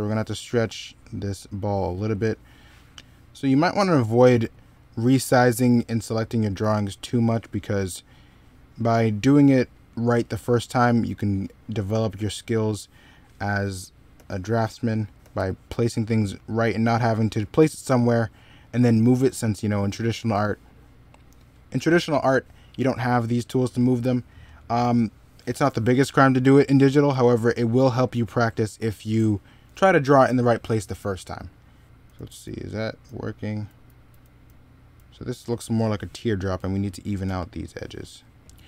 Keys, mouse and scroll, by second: 6.4 e, 14.0 b, 15.7 b, 21.5 middle click, 29.5 middle click, 30.8 middle click, 31.4-32.3 typing, 33.5 z, 34.3 x, 36.9 middle click, 37.1 e.